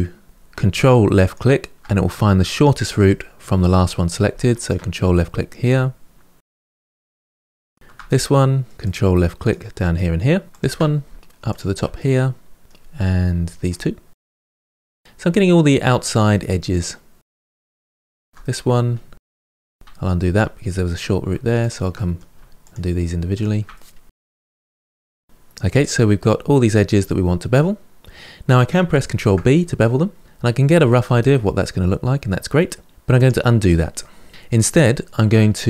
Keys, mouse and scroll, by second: 1.0 ctrl+click, 2.6-4.4 middle drag, 4.4 ctrl+click, 5.0-6.9 middle drag, 7.2 middle click, 7.6 shift+click, 7.8 middle click, 8.8 ctrl+click, 9.2 ctrl+click, 9.7-11.1 middle drag, 11.2 middle click, 11.8 shift+click, 12.6 ctrl+click, 12.9-14.2 middle drag, 14.2 shift+click, 14.6 shift+click, 14.9-17.7 middle drag, 17.7 ctrl+click, 18.2-19.2 middle drag, 19.2 ctrl+z, 19.9-21.4 middle drag, 21.4 shift+click, 21.7 middle click, 22.4 shift+click, 23.1 shift+click, 23.5 middle click, 24.2 shift+click, 24.4 middle click, 24.8 shift+click, 24.9-27.2 middle drag, 29.0 ctrl+b, 34.2 ctrl+z.